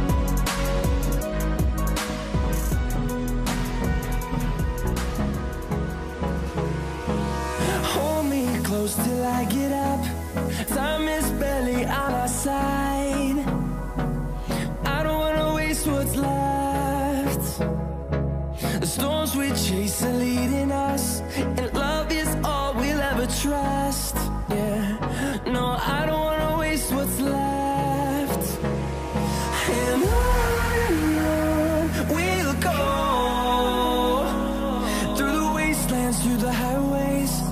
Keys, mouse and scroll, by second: 8.5 v.